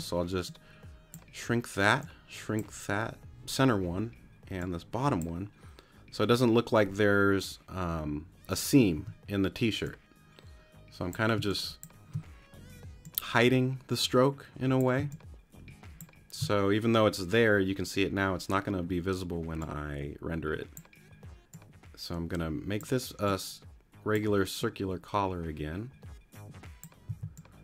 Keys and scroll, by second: 9.0 t, 11.4 space, 15.0 space, 27.1 c.